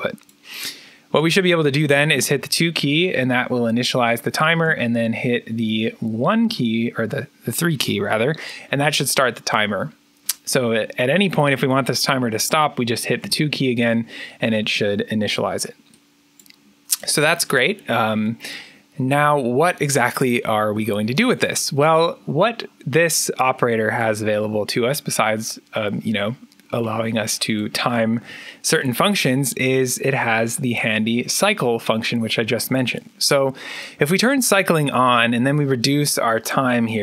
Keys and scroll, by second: 2.0 2, 4.5 3, 13.1 2.